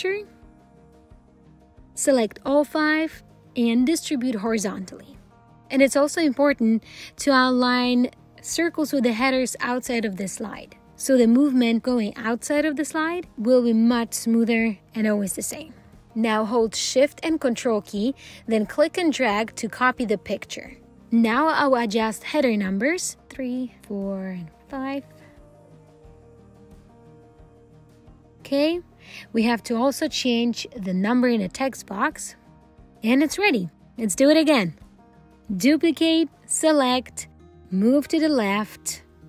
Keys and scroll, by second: 4.3 alt+h, 11.4 alt+c, 34.3 ctrl+d.